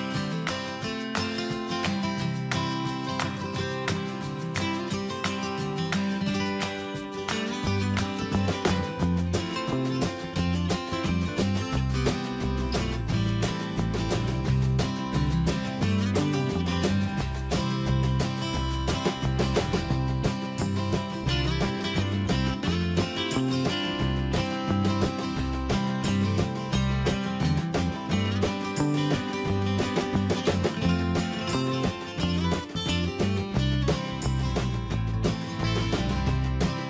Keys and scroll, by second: 11.7 Return, 13.7 ctrl+m, 18.6 Escape.